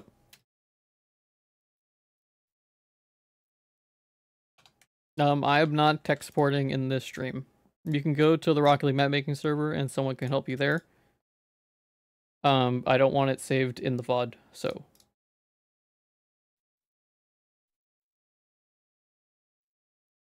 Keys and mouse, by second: 0.0 ctrl+s, 0.7 middle click, 1.0 z, 3.0-4.0 drag, 4.3 ctrl+s, 4.5 click, 4.6 Tab, 4.8 a, 5.5 Tab, 6.1 ctrl+s, 6.3 click, 7.2 click, 8.8-10.3 drag, 10.7 click.